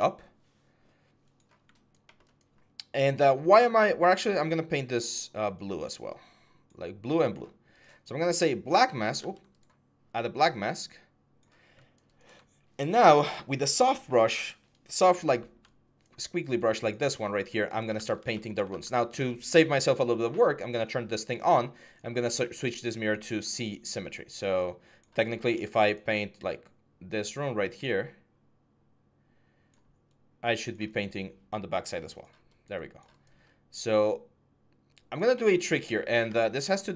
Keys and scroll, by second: 9.0 ctrl+z, 17.7 ctrl+z, 18.5 ctrl+z.